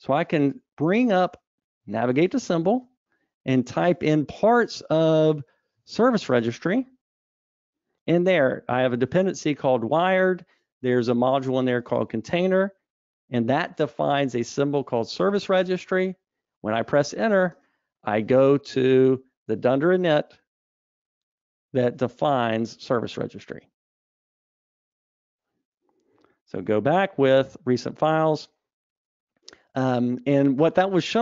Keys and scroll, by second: 27.1 super+e.